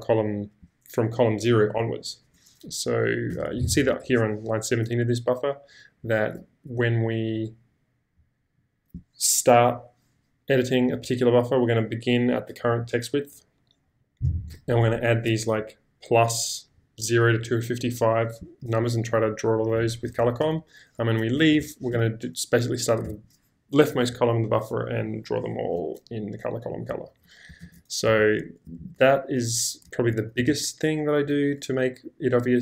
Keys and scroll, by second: 3.3 j, 3.6 shift+v, 21.4 Escape, 21.9 j, 23.0 shift+v, 27.1 ctrl+k, 27.6 ctrl+j, 28.2 ctrl+k, 28.8 ctrl+j, 30.5 ctrl+j.